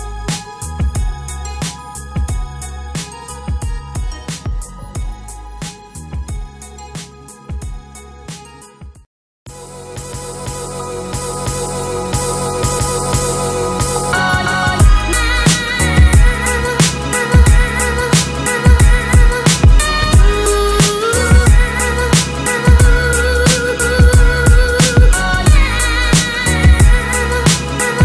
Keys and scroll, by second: 25.5 ctrl+c, 25.7 ctrl+b.